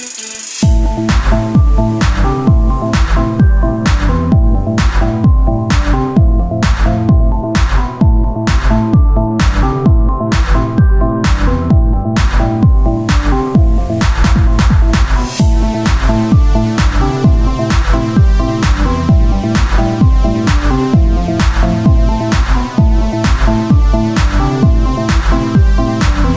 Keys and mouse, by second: 0.4 z, 1.3 s, 2.8 KP_1, 3.3 z, 5.2 z, 7.1 KP_1, 8.1 z, 9.0 shift+d, 11.0 s, 11.3 z, 12.0 r, 17.8 s, 21.7 s, 21.8-24.3 drag, 24.3 KP_1, 24.9 z, 26.0 shift+d.